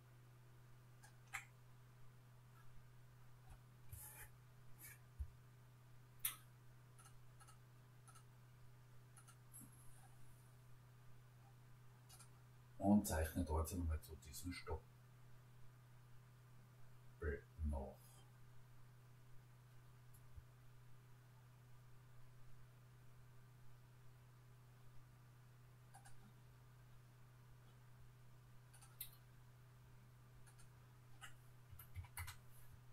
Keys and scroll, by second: 31.7 1, 32.0 6, 32.2 Return.